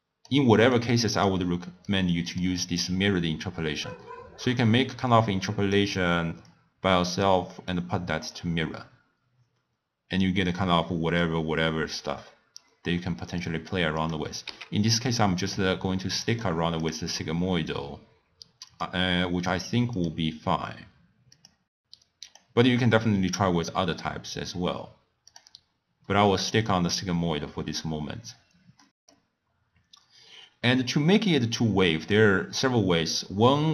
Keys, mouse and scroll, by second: 0.7 click, 1.8 click, 4.4-7.8 drag, 10.4-13.4 middle drag, 13.4 drag, 14.0 click, 14.7 x, 15.4 click, 16.1-16.8 middle drag, 16.8-19.8 drag, 19.9-25.2 drag, 26.1-27.3 middle drag, 27.3 scroll up 2, 27.4 scroll down 1, 27.7 scroll up 1, 27.8-28.8 scroll down 3, 28.8 middle click, 29.2-30.1 scroll up 2, 30.1-30.8 scroll down 2, 30.8-31.8 scroll up 3, 31.8-32.5 middle drag, 32.5-33.7 scroll down 1.